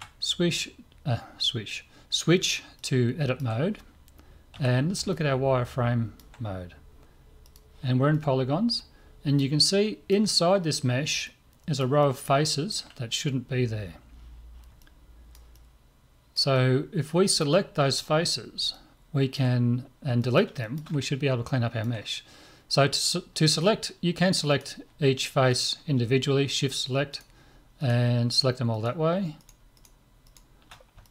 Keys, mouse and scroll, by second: 2.8-4.5 middle drag, 4.5 z, 5.1-7.0 middle drag, 7.4-9.4 drag, 8.2-14.2 middle drag, 14.8-18.4 middle drag, 18.7-23.1 middle drag, 23.3-24.5 middle drag, 24.5-31.1 right drag, 31.0-31.1 drag.